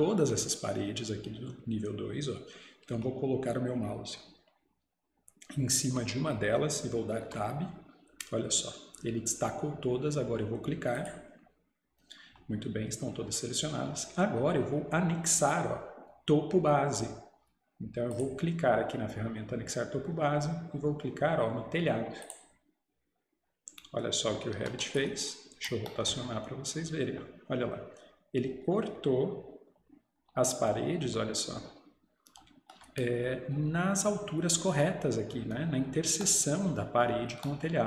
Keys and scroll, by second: 7.3 Tab, 24.6 Escape.